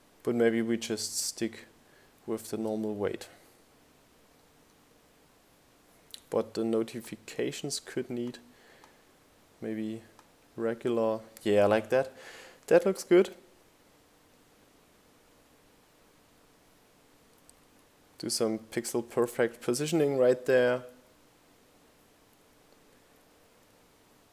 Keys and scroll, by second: 7.4 Up, 8.5 Up, 9.2 Down.